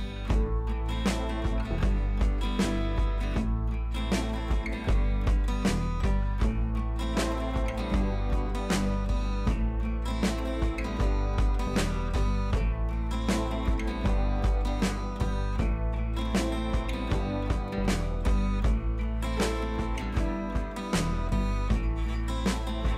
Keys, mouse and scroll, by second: 2.7 ctrl+t, 3.1-3.5 alt+drag, 13.1-14.0 drag, 16.3 ctrl+l, 17.0-17.5 drag.